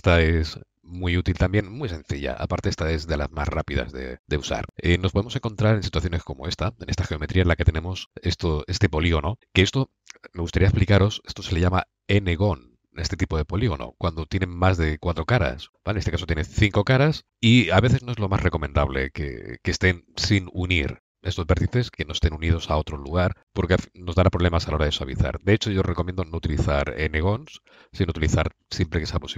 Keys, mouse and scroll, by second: 6.0-7.1 middle drag, 7.1-9.7 middle drag, 20.6 middle click.